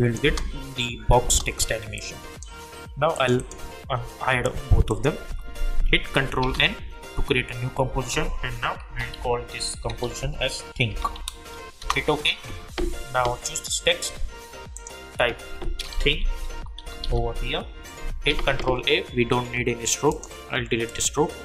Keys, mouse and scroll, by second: 0.2 space, 1.9 click, 5.2 u, 6.4 ctrl+n, 8.6-10.9 typing, 11.8 Return, 13.4 click, 15.6-17.5 typing, 18.3 ctrl+a, 20.1 click.